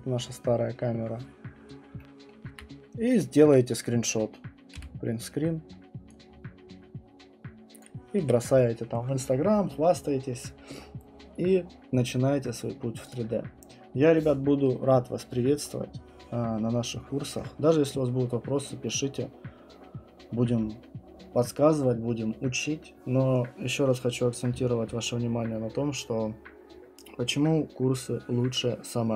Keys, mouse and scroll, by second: 1.3-1.9 scroll, 2.3 alt+middle click, 3.4 alt+middle click, 4.6 alt+middle click, 4.7 Print, 7.8 click, 8.2 Escape, 13.1 click.